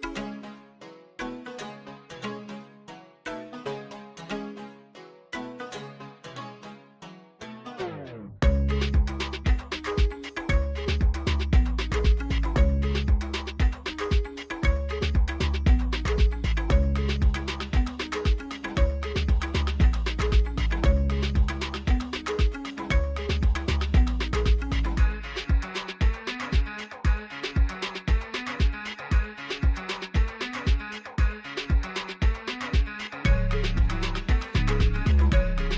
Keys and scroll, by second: 1.2-1.8 typing, 1.9 Return, 4.0-5.0 typing, 5.2 Return, 6.8 shift+d, 7.5 z, 8.0 Tab, 8.6 1, 8.7 shift+z, 10.5 shift+z, 11.0 g, 11.1 y, 13.1 Tab, 13.9 g, 14.0 y, 17.8 r, 18.1 x, 35.3 alt+a.